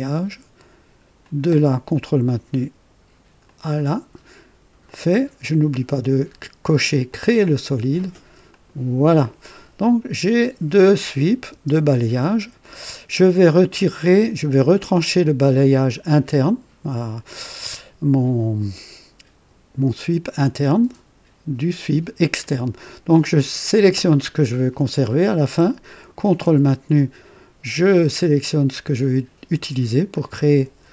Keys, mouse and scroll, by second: 1.2 click, 3.5 ctrl+click, 4.9 click, 7.1 click, 8.5 click, 10.8 click, 11.5 space, 13.7 scroll up 1, 14.1 right click, 14.7 click, 23.7 click, 30.2 ctrl+click.